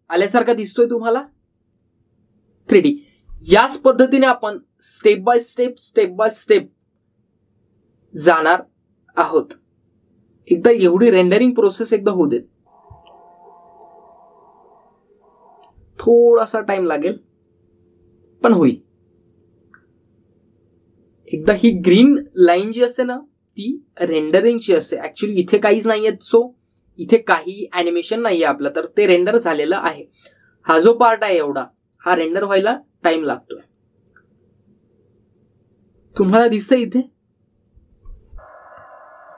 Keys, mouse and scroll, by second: 37.7-38.5 scroll up 1.